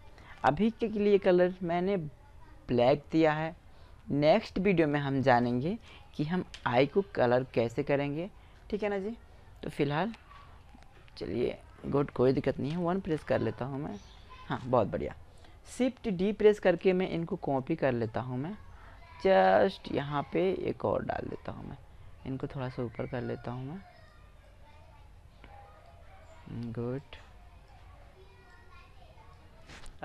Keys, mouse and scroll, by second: 4.2-5.9 right drag, 5.9 KP_1, 7.3-8.5 middle drag, 8.9 Tab, 10.2-12.0 middle drag, 12.0 KP_1, 14.6 middle click, 15.9 shift+d, 17.5-19.4 drag, 21.8-23.5 drag, 23.8-25.7 middle drag, 26.3-29.7 drag, 29.8 Tab.